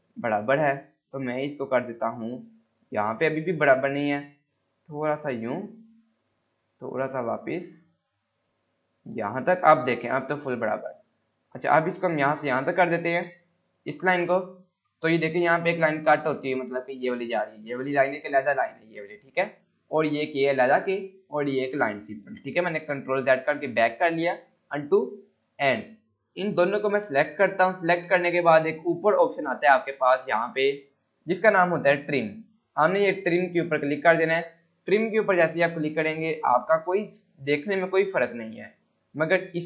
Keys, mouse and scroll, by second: 13.8 scroll down 1, 17.2 click, 23.1 ctrl+z, 24.5 scroll up 1, 25.8 scroll down 1, 26.3-27.6 click, 27.9 scroll up 1, 28.4 scroll down 1, 34.1 F9, 35.4 click, 35.7 scroll down 1.